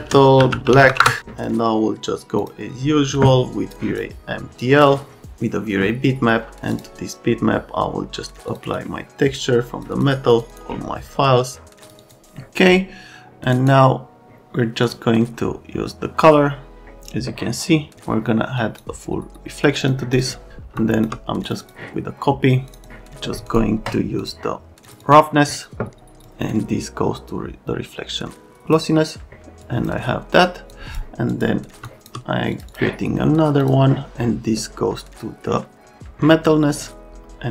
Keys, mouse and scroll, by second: 0.0-1.4 typing, 2.4 click, 3.7 click, 4.6 click, 6.7 click, 8.5 click, 8.6 click, 9.3 click, 9.9 click, 10.3 click, 10.5 click, 11.8 click, 12.0 click, 13.5 right click, 14.8 click, 18.6 click, 19.8 click, 20.2 click, 20.8 shift+click, 21.4 click, 21.6 click, 22.7 click, 22.8 click, 23.5 scroll down 1, 24.2 click, 24.8 click, 25.0 click, 26.2 click, 29.6 click, 30.7 click, 31.3 click, 31.8 shift+click, 32.5 click, 32.7 click, 33.6 click.